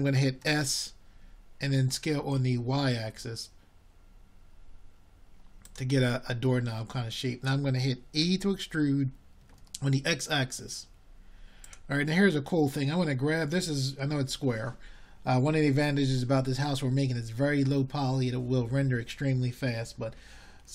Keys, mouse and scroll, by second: 3.3 s, 8.9-9.7 drag, 9.7 s, 11.0 middle click, 15.1-17.8 middle drag, 17.8 e.